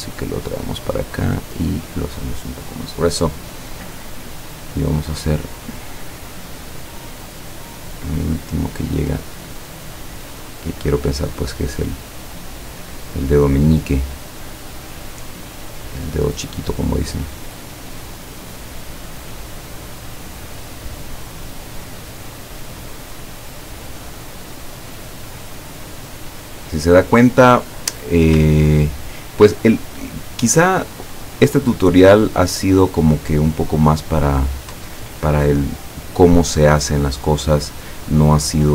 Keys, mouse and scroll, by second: 1.0 click, 6.5 click, 10.1 click, 13.3 click, 16.2 click, 19.0 click, 20.4 click, 21.5 click, 23.2 click, 23.8 click, 25.6 click, 26.1 click, 28.7-29.2 ctrl+scroll up 4, 30.3 alt+click, 30.9 click, 31.5-34.5 drag, 35.5 ctrl+click, 36.2-36.8 scroll down 4.